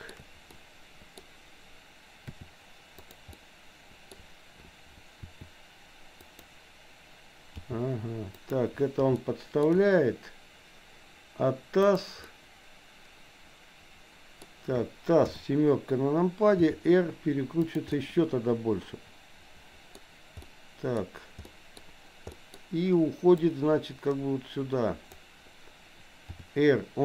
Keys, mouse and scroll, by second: 0.6 middle click, 2.3 r, 3.3 middle click, 5.2 r, 7.6 g, 9.2 shift+middle click, 11.8 click, 12.2-14.5 middle drag, 15.2 KP_7, 16.7 r, 18.0-20.0 middle drag, 20.3 middle click, 21.5 middle click, 22.3 middle click, 23.6-25.3 drag, 26.3 r.